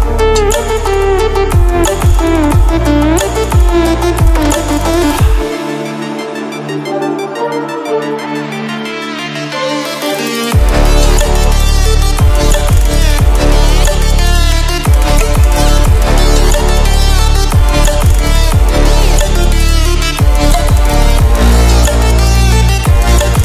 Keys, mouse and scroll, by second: 1.7 ctrl+w, 2.2 click, 6.4 ctrl+w, 9.1 ctrl+w, 9.7-12.7 drag, 16.0 ctrl+w, 19.7 ctrl+w, 20.8 click, 23.3 ctrl+w.